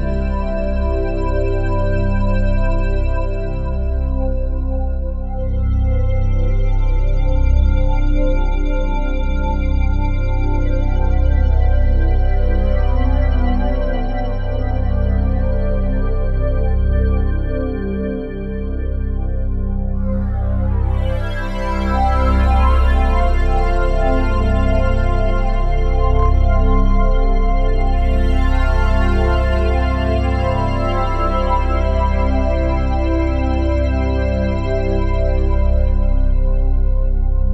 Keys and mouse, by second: 0.4 click, 1.0-3.0 alt+drag, 3.5 click, 5.6 click, 6.9 click, 8.0 click, 9.1 click, 10.5 3, 10.8 6, 11.1 Return, 13.0 alt+click, 13.1-13.8 typing, 13.3-20.2 alt+drag, 18.0 typing, 20.3 click, 20.5 click, 21.3 click, 21.9 typing, 23.1-29.7 alt+drag, 24.0-24.7 typing, 29.7 ctrl+i, 30.9 Down, 31.0 Down, 31.2 Return, 32.5 alt+a, 33.1 click, 33.5-34.9 alt+drag, 35.1 alt+shift+click, 35.8-37.5 ctrl+alt+drag.